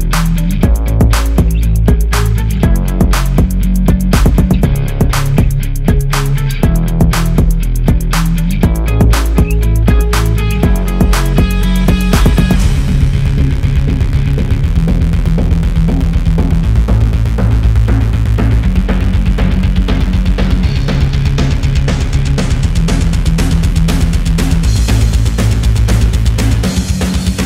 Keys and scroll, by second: 0.4-0.9 Left, 0.9-1.2 Right, 1.5 Left, 2.4-2.9 typing, 4.6 Up, 17.6-18.8 Left.